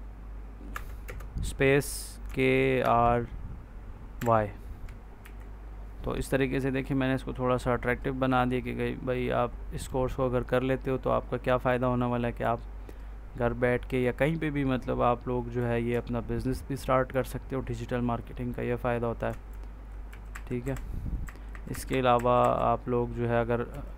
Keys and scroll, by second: 0.6 BackSpace, 1.0 space, 2.2 k, 2.7 r, 4.1 y, 5.1 ctrl+s, 19.4 Left, 20.2 Up, 23.6 Left.